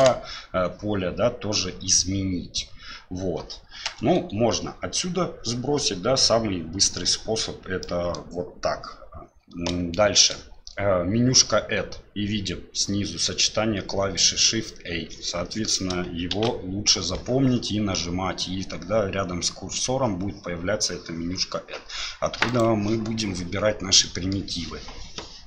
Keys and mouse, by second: 3.8 BackSpace, 6.2-7.0 middle drag, 7.8 middle click, 16.3 shift+a, 24.0 middle click.